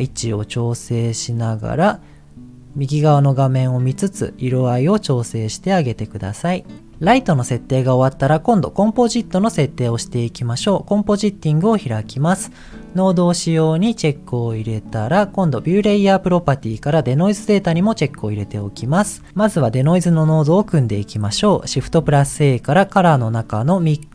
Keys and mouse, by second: 0.0 g, 6.9 ctrl+s, 13.8 click, 14.9 middle click, 17.7 click, 19.1 click, 22.2 shift+a.